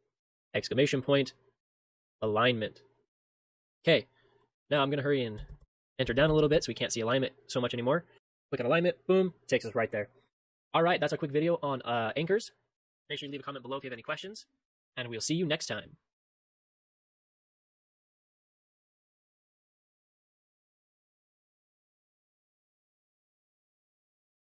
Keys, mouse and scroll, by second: 14.7 ctrl+shift+space.